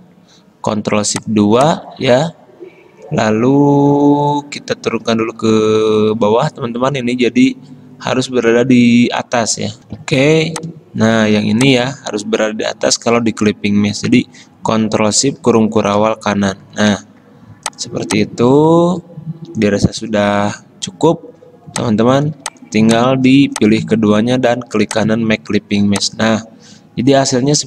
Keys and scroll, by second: 0.0 ctrl+alt+2, 10.7 F10, 16.1 ctrl+shift+].